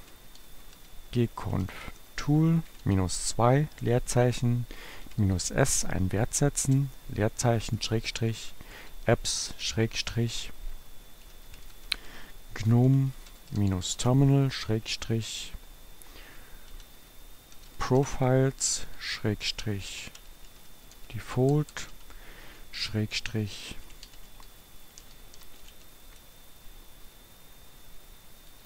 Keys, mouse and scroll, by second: 0.0-3.8 typing, 4.9-6.7 typing, 7.8-9.7 typing, 11.1-14.7 typing, 16.1-28.0 typing.